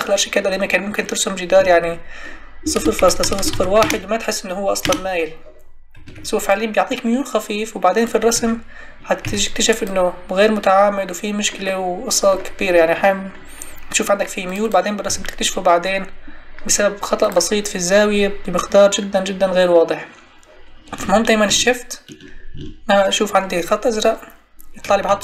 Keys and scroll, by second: 1.6 Tab, 3.8 Return, 6.0 Escape, 9.2 Escape, 15.1 Escape.